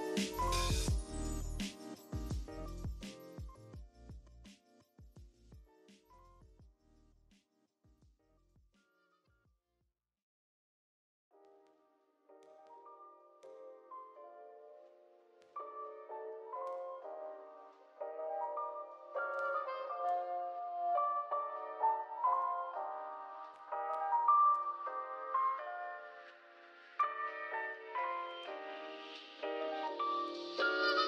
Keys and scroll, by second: 2.8-4.3 typing, 11.5-12.9 typing, 19.3 BackSpace, 26.0 z, 26.3 v, 29.7 i, 30.3 v.